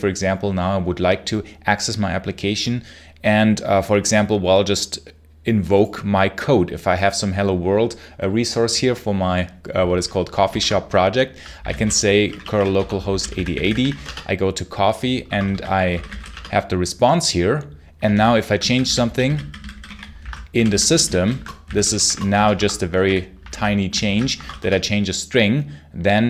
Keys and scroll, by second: 10.3 super+h, 10.4 super+Return, 11.2-16.5 typing, 18.0 super+l, 18.5-24.3 typing, 23.9 super+h, 24.2 Escape, 24.5 Return.